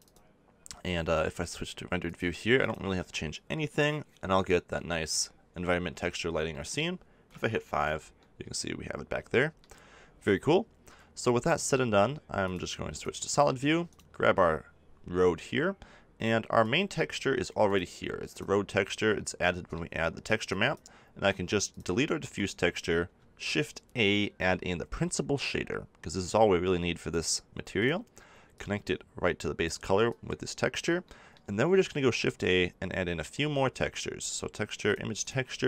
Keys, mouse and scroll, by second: 3.9-5.6 middle drag, 13.4 click, 13.8-15.8 middle drag, 16.6-19.7 drag, 20.4-21.6 drag, 22.2 x, 27.8-31.9 drag, 35.2 shift+click.